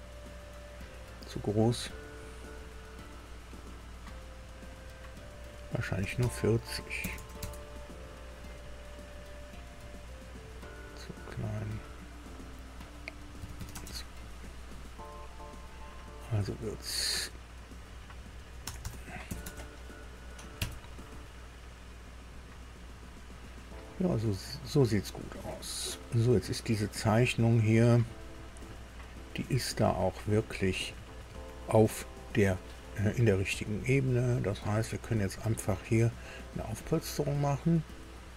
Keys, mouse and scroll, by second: 1.7 click, 3.9 click, 5.1 click, 6.0 BackSpace, 6.2 BackSpace, 7.0 KP_4, 7.1 KP_0, 7.4 KP_Enter, 9.5 click, 11.6 click, 13.3 KP_2, 13.7 KP_2, 13.7 KP_0, 15.6 click, 16.7 click, 17.8 click, 18.6 BackSpace, 18.8 BackSpace, 19.4 KP_6, 19.4 KP_0, 20.5 KP_Enter, 22.2 click, 25.8-26.9 middle drag, 27.0 scroll down 1, 27.4-29.5 middle drag, 29.9-30.5 scroll up 1, 30.8-33.3 middle drag, 34.3 click, 37.7 click.